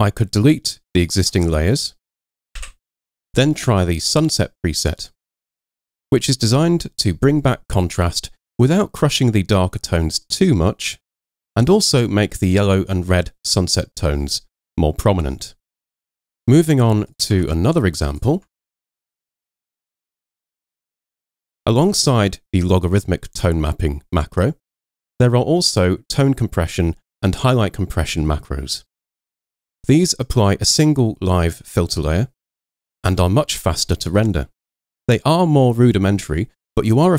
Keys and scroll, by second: 2.6 Delete, 16.3 super+w, 17.4 super+Tab, 18.4 super+Tab, 19.7 super+Tab.